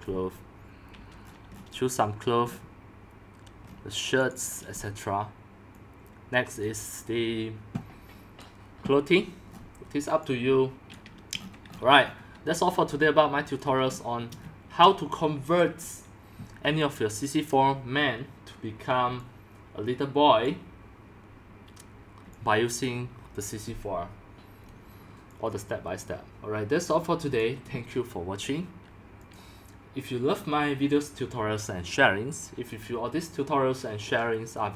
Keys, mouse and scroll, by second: 1.2-1.8 scroll down 10, 1.8 scroll, 2.4-2.8 scroll, 3.6 scroll, 3.7-4.3 scroll down 4, 4.3-5.5 drag, 6.2-9.5 drag, 9.5-10.8 scroll down 6, 11.0 click, 11.3-12.1 scroll down 12, 12.1-12.5 scroll up 10, 12.2-15.4 typing, 13.2-13.5 scroll down 1, 14.0 scroll up 1, 14.2 middle click, 14.2-14.5 shift+scroll, 14.8 shift+scroll up 1, 14.9 shift+middle click, 15.6-18.7 drag, 16.6-17.5 c, 19.0-20.4 c, 20.4 click, 22.2-23.0 typing, 23.0 click, 27.3-34.4 drag.